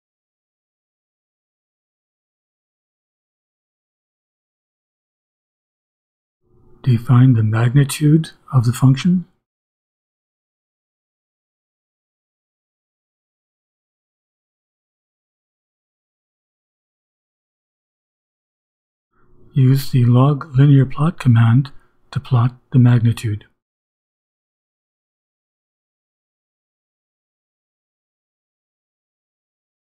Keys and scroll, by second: 0.9 Return, 2.4-5.4 typing, 6.2 Return, 6.8-17.4 typing, 18.3 Return, 18.8-25.9 typing, 28.3-29.9 typing.